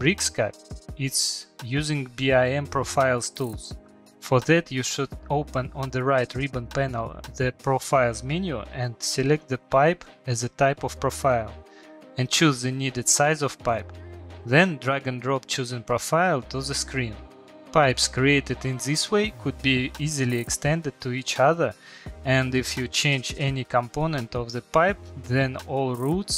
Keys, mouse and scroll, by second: 2.1 click, 3.6 click, 4.3 click, 5.4 click, 7.7 click, 8.8 click, 9.6 click, 10.2 click, 10.9 click, 11.9 click, 12.7 Return, 15.0 shift+middle click, 15.7 middle click, 17.0 shift+middle click, 17.5 Escape, 17.5 click, 17.9 click, 20.2 click, 22.6 shift+middle click, 22.8 middle click, 22.8 middle click, 22.9 middle click, 23.2 middle click, 23.2 shift+middle click, 23.5 shift+middle click, 24.5 click, 25.5 click.